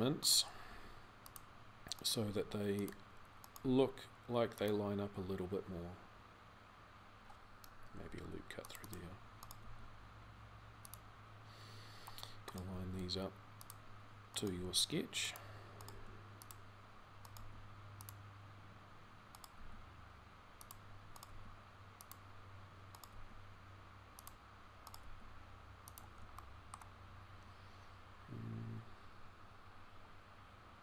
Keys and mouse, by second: 0.4 g, 2.0 g, 7.9 ctrl+r, 9.4 g, 12.5 g, 17.2 g, 22.9 g.